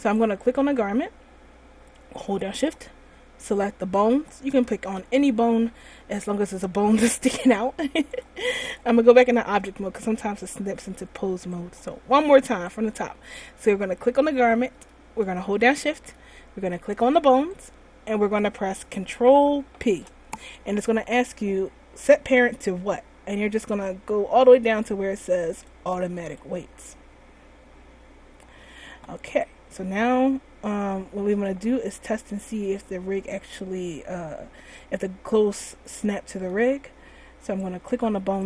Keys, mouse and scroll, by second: 0.5 right click, 4.3 shift+right click, 8.2 click, 9.1 click, 11.9 right click, 12.8 right click, 17.4 shift+right click, 19.8 ctrl+p, 29.4 middle click, 36.0-36.3 middle click, 36.4 middle click, 38.0 right click.